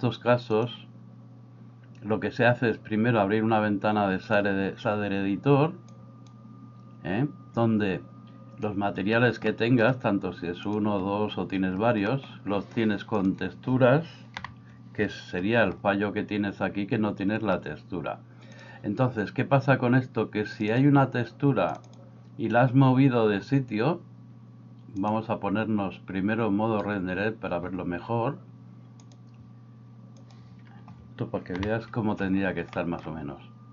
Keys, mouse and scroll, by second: 0.5-4.5 drag, 6.0 click, 9.5 middle click, 12.2 middle click, 13.1 click, 14.4 ctrl+t, 18.6 click, 31.7 ctrl+t, 32.8 middle click.